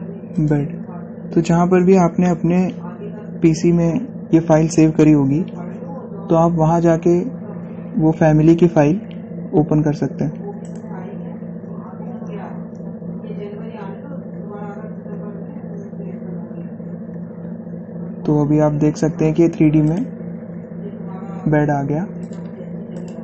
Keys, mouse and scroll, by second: 1.1 click, 11.3 click, 15.0-15.3 scroll up 1, 20.6 click, 22.9 click.